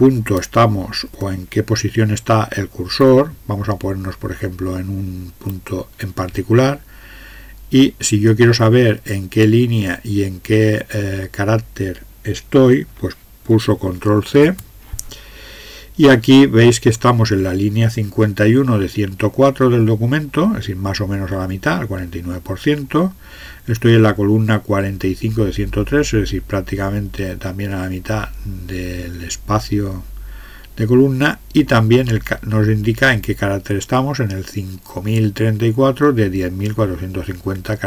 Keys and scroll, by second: 3.0 Up, 14.3 ctrl+c.